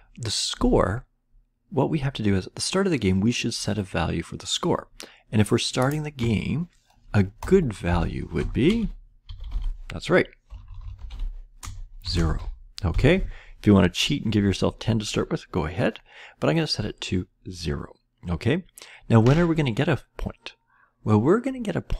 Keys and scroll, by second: 7.3 Return, 7.8 Return, 8.1-12.9 typing.